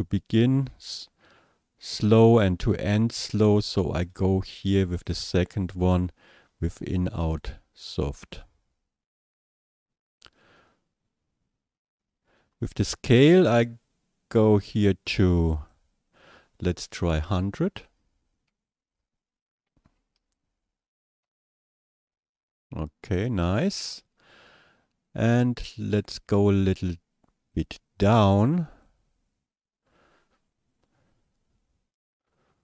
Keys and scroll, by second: 19.9 KP_1, 20.2 KP_0, 20.4 KP_0, 21.2 Return.